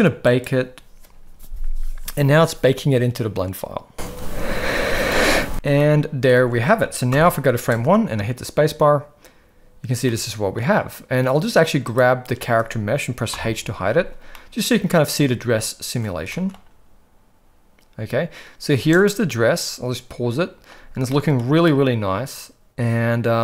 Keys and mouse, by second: 0.3-5.5 drag, 5.8-6.3 middle drag, 6.4 alt+a, 7.2 shift+Left, 7.6 space, 10.1 middle click, 11.9 drag, 13.3 h, 14.4-15.0 middle drag, 16.3 shift+middle click, 18.8 space, 19.1-20.7 middle drag, 21.0-21.4 shift+middle drag, 21.6-23.4 middle drag.